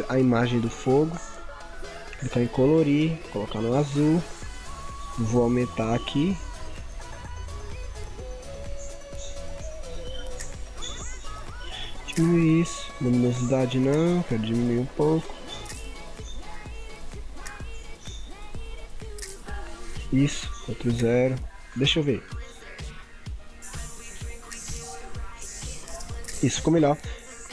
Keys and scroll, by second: 20.7 ctrl+0, 21.3 ctrl+=.